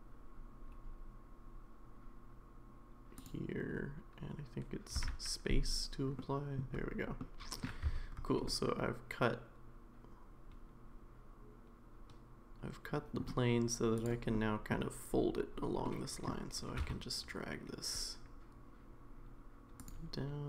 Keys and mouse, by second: 6.2 middle click, 7.2 middle click, 8.4-13.2 middle drag, 8.4 1, 14.3 middle click, 15.8 middle click, 16.7 g.